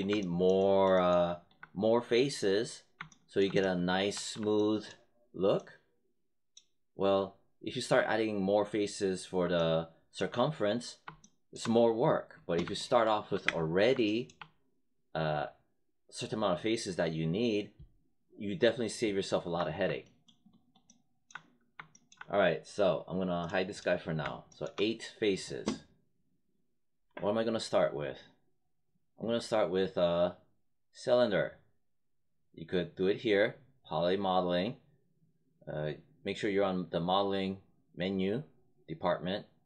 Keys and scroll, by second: 12.3 space, 13.4 space.